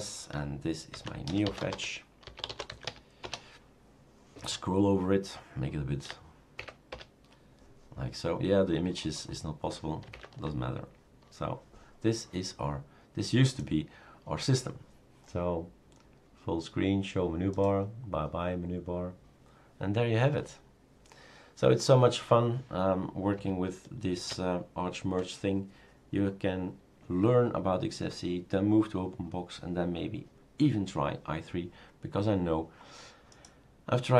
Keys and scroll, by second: 0.7-3.3 typing, 6.7 Up, 6.9 Return, 10.1 super+Up, 24.3 shift+super+q.